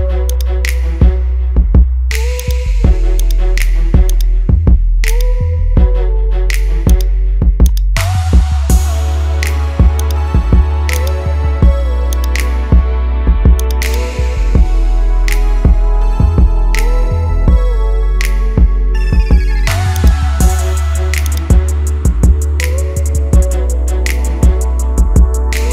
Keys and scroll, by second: 11.5 ctrl+z, 24.0 ctrl+z.